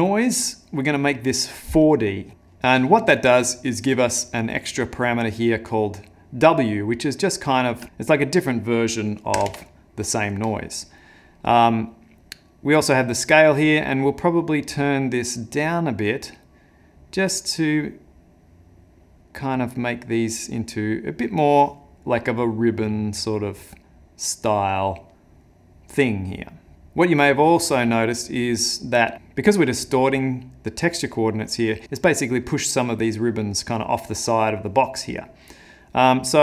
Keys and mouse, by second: 5.0 click, 8.2 click, 12.9 click, 29.1 ctrl+middle click, 29.4 middle click, 29.9 middle click, 31.2 middle click, 31.2 ctrl+middle click, 32.1 middle click, 35.0 middle click, 36.0 middle click.